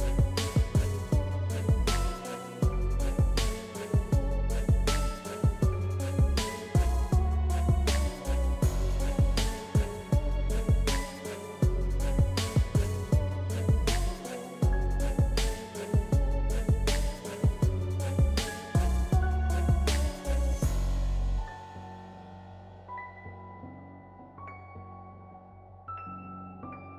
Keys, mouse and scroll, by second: 14.7-26.9 drag.